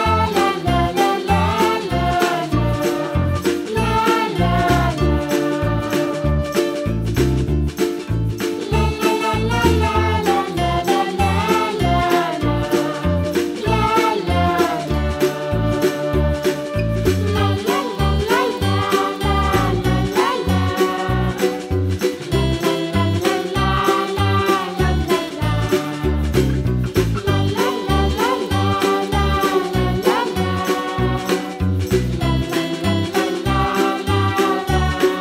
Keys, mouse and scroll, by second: 0.2 s, 2.6 g, 3.6-4.8 middle drag, 5.9 click, 6.0 p, 6.7 Tab, 6.9 click, 7.5-12.5 drag, 12.5-12.8 middle drag, 12.8 scroll up 2, 13.4-14.7 drag, 15.9-17.9 drag, 17.9-18.3 scroll down 1, 18.3-19.3 middle drag, 19.3 shift+d, 21.1-22.3 middle drag, 22.8 click, 24.0 g, 26.0-27.2 middle drag, 27.2 click, 27.6 scroll down 1, 27.7-29.0 middle drag, 29.4 click, 29.8 click, 30.1-31.1 scroll up 5, 31.1 click, 31.6-32.3 scroll down 5, 31.6 middle drag, 32.3-33.0 middle drag, 33.0 click, 33.5 click, 34.9-35.2 drag.